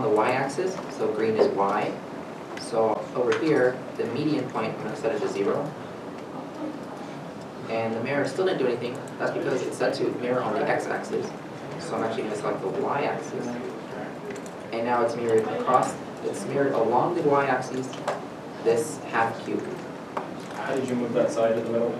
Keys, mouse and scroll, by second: 5.2 middle click, 5.2 0, 5.4 Return, 7.3 scroll, 7.4 Tab, 14.0 Tab, 14.0 middle click, 18.2 Tab, 18.4 scroll, 19.2 middle click, 19.2 scroll up 1, 20.4 Tab, 20.7 middle click, 21.2 Tab, 21.6 Tab, 21.8 scroll down 1.